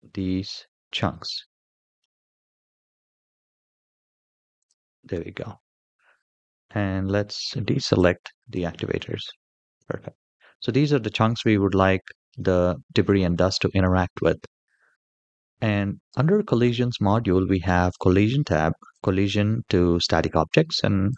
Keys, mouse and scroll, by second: 5.9-6.4 middle drag, 6.8-7.1 shift+middle drag, 7.7-8.4 ctrl+drag, 8.9-9.5 shift+middle drag, 9.7-10.5 middle drag, 11.1-12.1 middle drag, 18.7 click, 20.9 click.